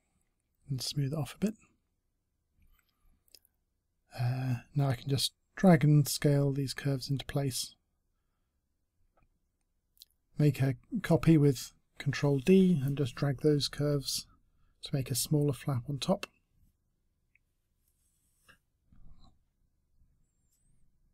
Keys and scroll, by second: 0.6 s, 0.7 s, 4.9 space, 5.2 e, 5.7 r, 8.2 e, 10.1 w, 12.2 e, 15.3 t, 19.8 space, 20.1 space.